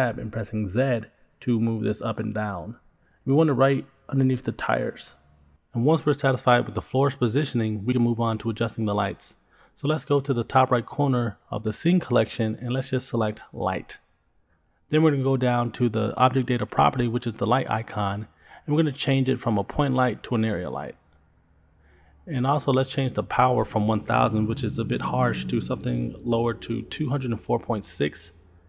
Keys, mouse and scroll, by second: 8.4 click, 9.7-10.0 scroll down 3, 10.8-11.4 scroll up 1, 14.9 click, 19.0 click, 21.3 click, 24.3-28.6 drag.